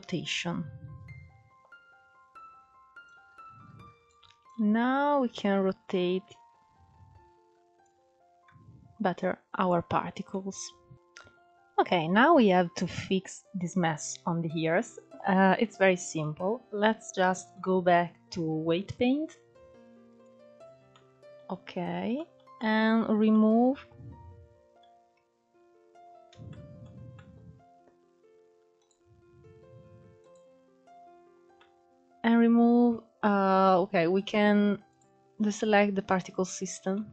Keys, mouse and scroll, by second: 1.4-5.9 drag, 6.4 scroll up 3, 6.8-8.6 middle drag, 8.6 scroll down 2, 8.7-10.9 middle drag, 11.3-11.9 scroll up 3, 11.9-15.5 shift+middle drag, 15.5 click, 16.3-16.9 scroll down 2, 16.9-18.3 middle drag, 18.3-20.3 drag, 20.3 middle click, 21.0-21.6 scroll up 2, 21.6-24.1 shift+middle drag, 24.1-25.3 scroll up 9, 25.3-25.8 scroll down 2, 25.8-28.1 shift+middle drag, 28.1 click, 29.5 click, 30.8 middle click, 31.7-32.1 scroll up 2, 34.2 click, 35.5 click, 36.2-37.1 middle drag.